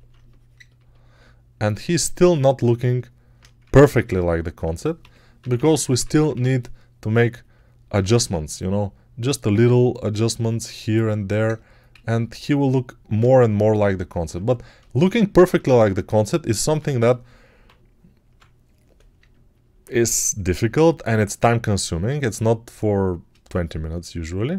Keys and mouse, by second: 3.5 ctrl+Tab, 4.9-6.2 typing, 8.2 alt+q, 12.6 alt+q, 16.8 1, 17.5-18.2 [, 19.4 alt+right click.